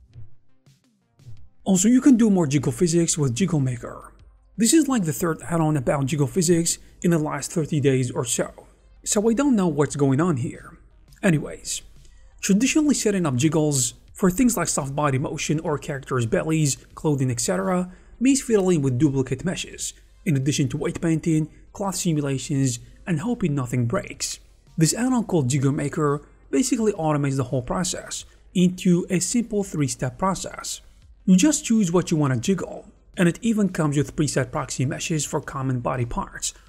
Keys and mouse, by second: 1.8 click, 2.3 click, 2.5 middle click, 2.7 click, 2.7 r, 3.2 space, 4.1 d, 5.6 space, 6.9 click, 7.5 click, 8.1 click, 8.5 click, 9.1 click, 9.5 click, 9.9 click, 11.9 click, 12.5 click, 13.1 click, 14.1 click, 15.9-18.7 drag, 19.3 click, 20.7-22.5 drag, 24.0 click, 26.4 ctrl+click, 27.1 g, 27.7 Tab, 29.5 click, 30.5 click, 31.1 click, 31.5 space, 32.6 click, 33.1 click, 33.9 space, 34.4 click, 36.5 middle click.